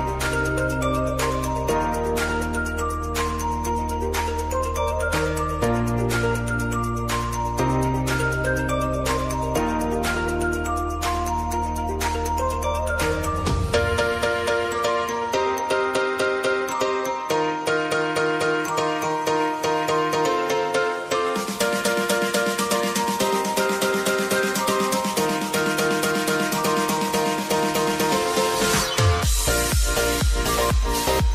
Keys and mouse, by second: 6.9-15.8 drag, 16.0-25.5 drag, 26.5 ctrl+alt+Home, 28.3-31.3 drag.